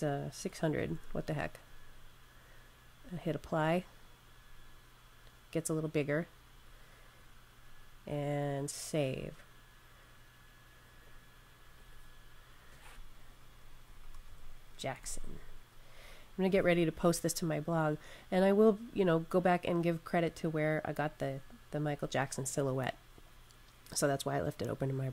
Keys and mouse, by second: 0.1-1.5 typing, 3.3 typing, 3.4 click, 10.8 click, 13.4-15.4 typing, 18.0 click.